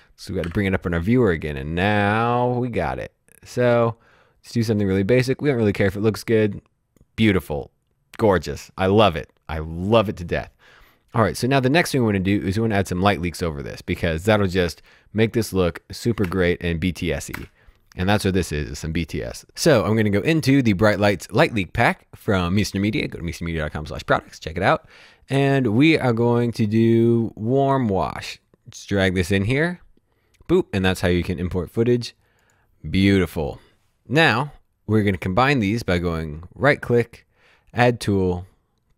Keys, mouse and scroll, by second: 0.4 2, 2.7 click, 5.3 click, 11.1 click, 16.2 space, 21.6 click, 21.9 click, 27.8 click, 32.4 click, 36.0 right click.